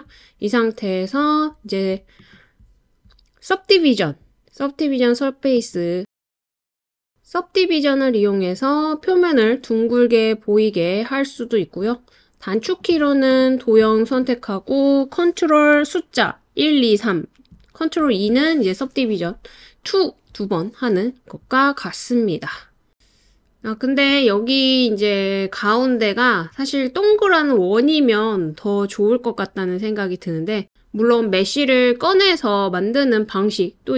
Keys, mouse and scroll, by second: 2.2-5.5 drag, 7.4 click, 12.6 click, 13.3 click, 18.0 super+2.